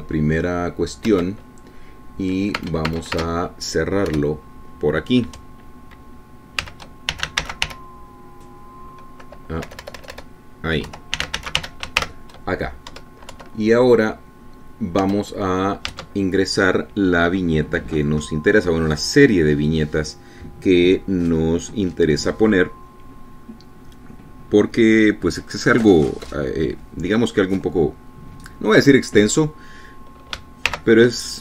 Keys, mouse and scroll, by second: 0.5 shift+., 2.2 Return, 3.7 space, 5.3 BackSpace, 7.5-9.3 typing, 10.8 BackSpace, 12.1-13.6 typing, 14.1 Up, 14.5 End, 16.2 Return, 17.0 Tab.